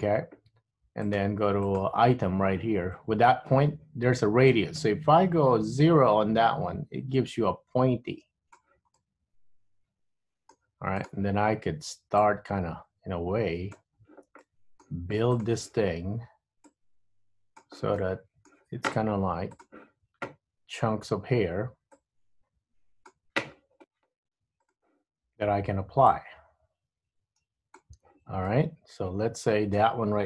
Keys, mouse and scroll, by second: 1.1 click, 1.8 click, 9.1 click, 9.1 middle click, 11.2 click, 12.3 click, 14.6 middle click, 16.8 click, 18.1 middle click, 19.6 click, 22.0 click, 25.2 click, 26.2 click, 28.6 middle click.